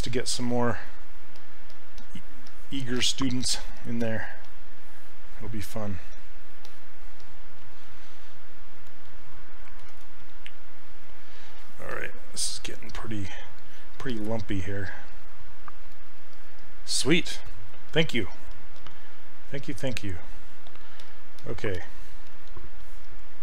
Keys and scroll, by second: 9.9 shift+f.